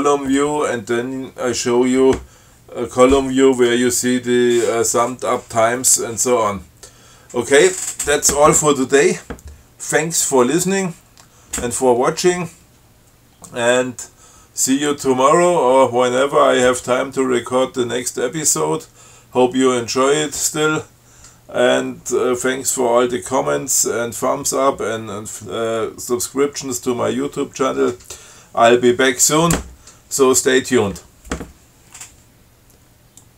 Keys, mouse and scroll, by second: 13.7-14.3 scroll down 4.